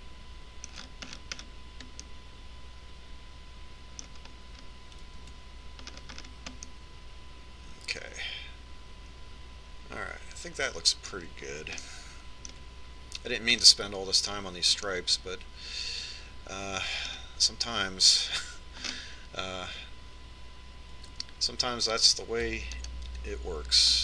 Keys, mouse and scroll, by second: 0.6-5.0 middle drag, 5.6 middle click, 6.5 Tab, 13.1-14.9 middle drag, 16.3-17.9 middle drag, 20.1 middle click, 22.3 Tab.